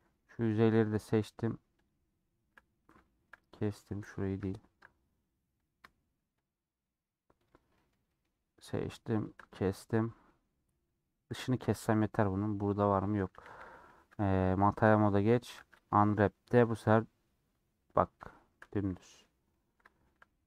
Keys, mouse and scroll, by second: 1.7 shift+click, 2.9 shift+middle click, 3.5 click, 4.1 middle click, 4.3 scroll down 1, 4.4 shift+middle click, 5.1-7.7 drag, 7.7-9.0 shift+middle drag, 9.0 shift+click, 9.7-10.2 scroll down 1, 10.2-11.4 middle drag, 11.4 scroll down 2, 11.7-13.2 middle drag, 13.2 a, 14.9-15.3 scroll up 2, 15.4 Tab, 17.3 scroll down 2, 18.2-20.4 shift+middle drag.